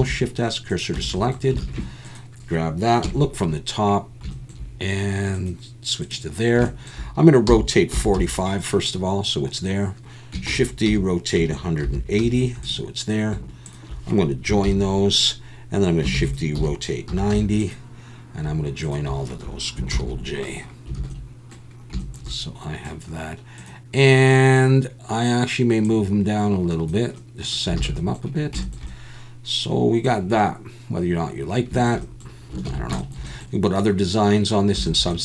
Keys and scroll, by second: 1.0 Tab, 1.6 alt+a, 3.0 KP_7, 7.5 r, 7.9 4, 8.1 5, 10.5-12.2 typing, 14.6 ctrl+j, 16.2 shift+d, 16.5 r, 17.1 9, 17.3 0, 19.9 ctrl+j, 21.0 alt+a, 27.8 alt+a, 32.7 ctrl+s.